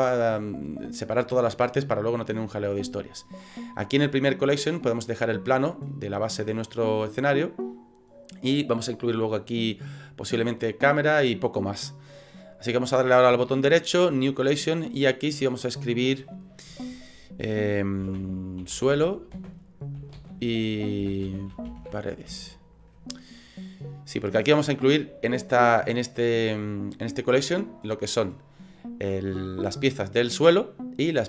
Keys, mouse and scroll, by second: 5.9 middle click, 13.4 right click, 15.3 click, 15.5 click.